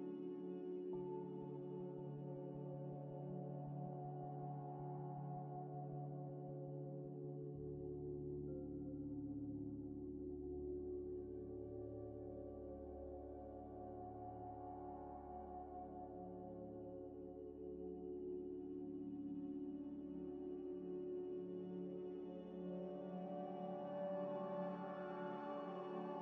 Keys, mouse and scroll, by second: 0.9 scroll down 1, 1.3-3.0 typing, 1.4 shift+click, 3.1 KP_Enter, 5.8 scroll down 1, 7.9 g, 7.9 z, 9.2 s, 10.0 middle click, 11.1 x, 13.0 z, 14.6 g, 14.6 z, 15.2 Tab, 15.7 3, 16.3 shift+click, 16.9 p, 17.8 Tab, 18.5 double click, 21.2 g, 21.2 z, 21.8 middle click, 22.2-22.6 scroll up 2, 22.6 ctrl+z, 23.5 Tab, 23.8 Tab, 23.9 1, 24.3 g, 24.4 y.